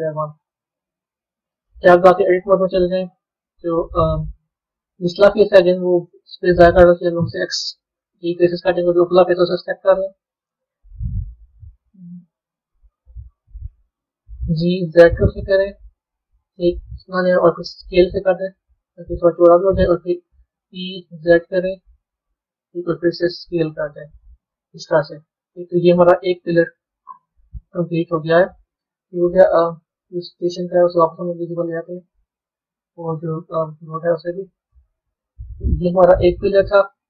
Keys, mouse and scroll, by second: 1.8 b, 2.4-5.8 middle drag, 5.8 click, 8.3 middle click, 8.8 middle click, 9.4 click, 10.6 KP_1, 25.6-27.6 middle drag, 27.6 Tab, 28.0-30.7 middle drag, 30.7 click, 31.3-31.8 scroll down 3, 31.8-33.8 middle drag, 33.8 click, 35.4 KP_3, 36.0-37.0 scroll down 7.